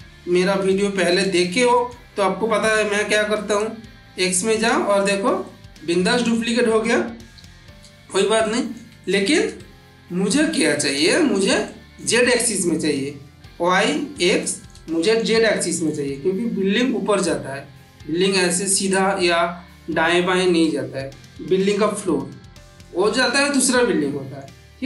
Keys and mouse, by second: 0.6 middle click, 1.1-2.0 ctrl+middle drag, 3.4-4.7 drag, 5.4-6.3 middle drag, 7.2 ctrl+z, 8.3-10.3 middle drag, 14.3 middle click, 14.8 shift+middle click, 15.7 middle click, 22.7-24.6 middle drag.